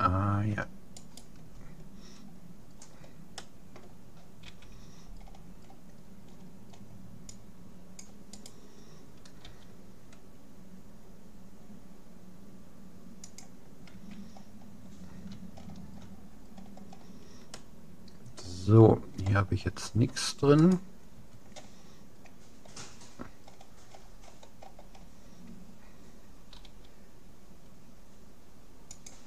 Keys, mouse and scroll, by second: 1.0-2.6 right drag, 2.8-5.0 middle drag, 4.4 c, 8.6-10.2 right drag, 9.4 g, 14.0 a, 14.3 middle click, 17.6-19.2 middle drag, 19.6-20.6 scroll down 1, 20.6-22.4 right drag, 22.4-23.8 middle drag, 24.0-26.8 middle drag, 26.6 g.